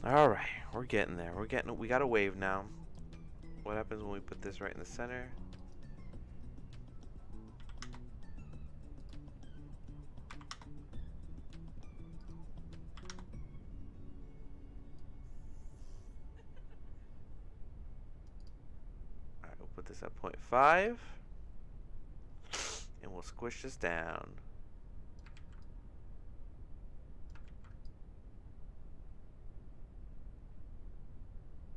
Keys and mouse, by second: 0.3 click, 2.2 click, 2.9-4.8 drag, 5.5-11.4 drag, 12.2-14.2 drag, 15.0-18.3 drag, 18.4-20.8 drag, 24.2 click, 25.4 ctrl+z, 25.6-27.3 drag, 27.6 ctrl+z, 27.8-31.7 drag.